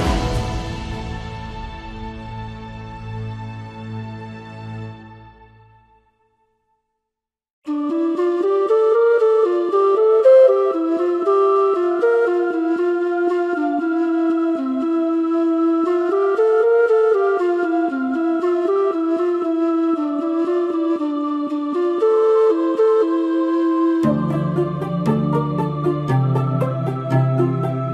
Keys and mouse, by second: 2.2-3.6 middle drag, 4.2 KP_7, 4.6 z, 5.4 shift+middle click, 7.7 shift+middle click, 14.7 s.